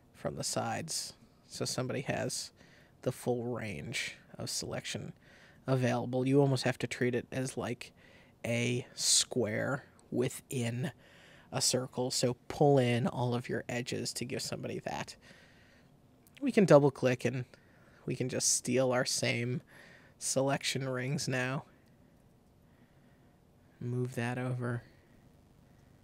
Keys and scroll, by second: 21.3 super+c, 22.1 super+v.